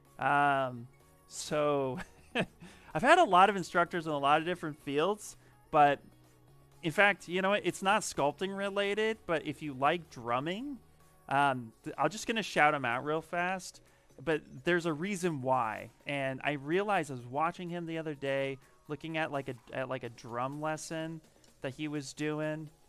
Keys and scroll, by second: 9.5-10.3 typing, 12.8-15.7 typing.